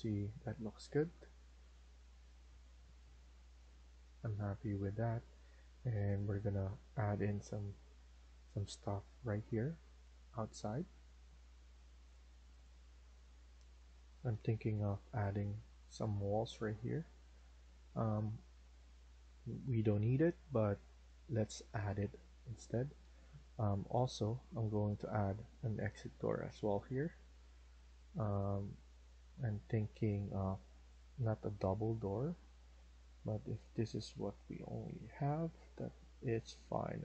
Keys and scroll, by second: 0.2 Escape, 22.6 Escape, 22.9 Escape.